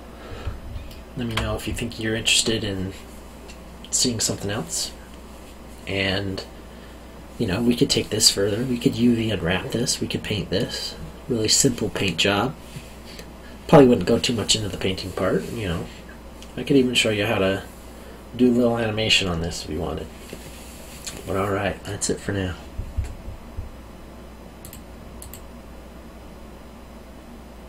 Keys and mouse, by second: 0.8 alt+middle click, 24.6 click.